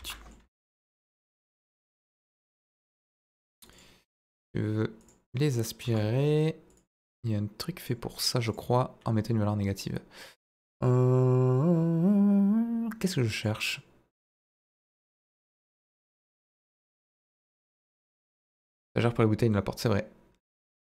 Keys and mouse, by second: 0.1 middle click, 0.4 Escape, 0.7 s, 0.9 z, 1.6 click, 2.1 g, 2.1 middle click, 2.9 ctrl+drag, 4.9 click, 5.8 g, 5.8 middle click, 6.6 click, 8.5-12.7 drag, 13.3 click, 20.4 click.